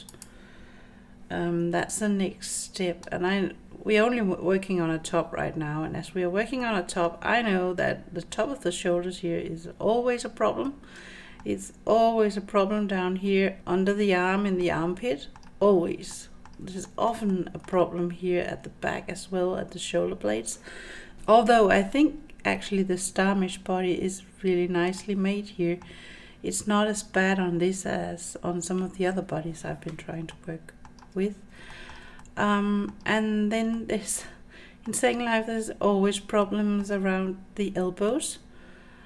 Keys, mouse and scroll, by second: 1.8-4.8 middle drag, 6.6 middle click, 6.6 scroll up 1, 7.4-8.4 scroll up 3, 10.7-13.2 middle drag, 14.6 middle click, 15.7-16.1 scroll down 2, 16.1 middle click, 16.8-18.8 shift+middle drag, 25.0 middle click, 30.3 middle click, 31.3 scroll down 3, 31.7 shift+middle click, 32.2 middle click, 33.8-34.8 middle drag, 35.4-36.2 scroll up 4, 36.4 shift+middle click, 38.1-39.0 middle drag.